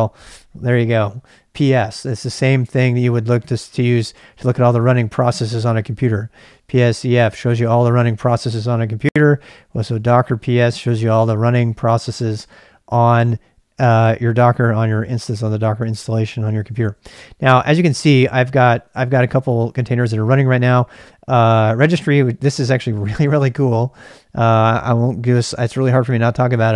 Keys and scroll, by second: 3.5-4.3 typing, 4.4 Return, 5.9-7.4 typing, 9.2-10.7 typing.